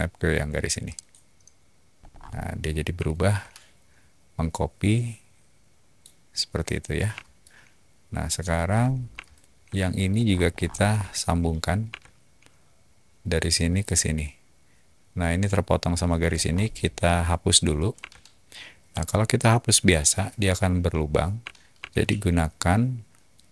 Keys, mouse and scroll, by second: 0.8 click, 1.9 middle click, 2.0 scroll down 2, 3.0-5.9 shift+middle drag, 7.3 shift+middle click, 8.6 middle click, 9.2 shift+middle click, 10.1 scroll up 2, 10.2 middle click, 10.3 scroll, 10.4 middle click, 11.6-12.3 typing, 16.3 middle click, 17.9 e, 17.9 e, 18.9 click, 22.4 ctrl+z.